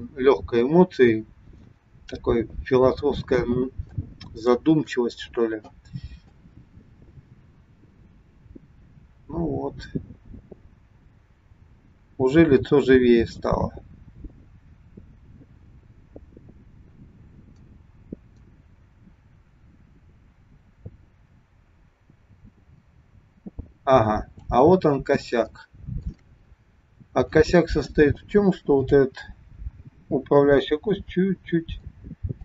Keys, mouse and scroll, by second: 1.9-3.2 scroll down 2, 4.0 shift+middle click, 6.5 click, 25.0-25.4 scroll up 2, 25.6 shift+middle click, 27.2 click, 28.0 scroll up 1, 28.7 click, 30.7 g.